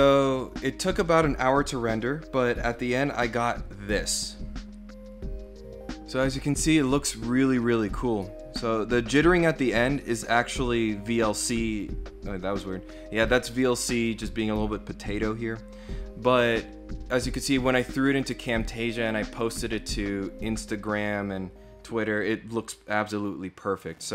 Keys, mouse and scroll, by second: 2.8 click.